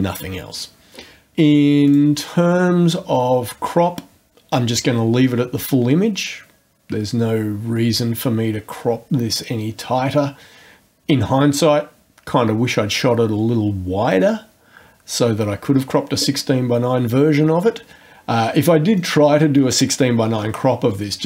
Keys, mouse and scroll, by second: 1.9 click, 19.0 click.